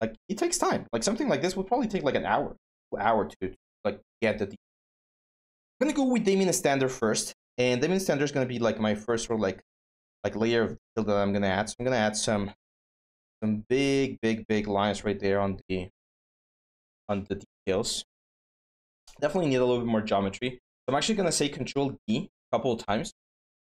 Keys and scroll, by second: 2.1-2.9 typing, 4.9-6.1 typing, 19.3 ctrl+z, 21.8 ctrl+d.